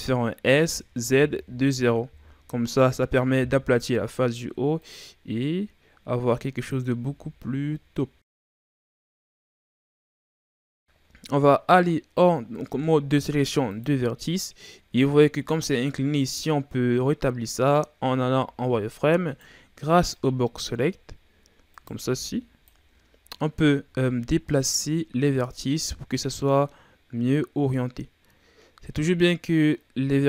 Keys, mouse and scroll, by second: 0.6 s, 2.9 KP_3, 4.8-6.9 drag, 6.9 z, 7.9-8.6 scroll up 3, 8.6-9.1 ctrl+scroll down 1, 9.1 z, 9.7-10.4 scroll down 3, 10.4-12.6 scroll up 4, 12.6 ctrl+Tab, 15.0-15.4 shift+scroll down 2, 15.4-18.4 scroll up 2, 18.4 z, 19.2 right click, 19.8 b, 20.9-21.7 scroll up 2, 21.7 right click, 22.0 b, 23.8 g.